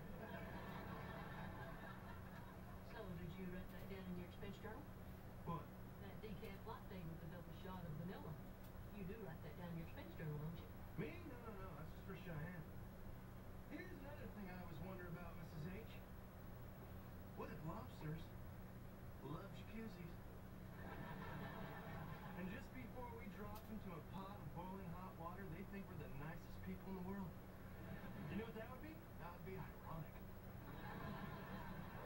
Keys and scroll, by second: 6.3 shift+Right, 7.5 Right, 8.4 Right, 18.4 shift+Left, 19.0 Left, 21.8 Up, 22.0 Left.